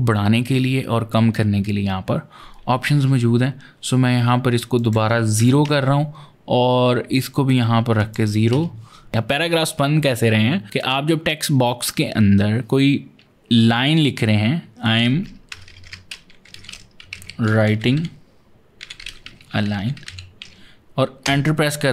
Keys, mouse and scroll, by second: 4.5 click, 5.2 KP_0, 5.4 KP_Enter, 6.9 click, 7.8 click, 8.3 KP_Decimal, 14.8 o, 14.9 space, 16.4-20.3 typing, 21.0 Return.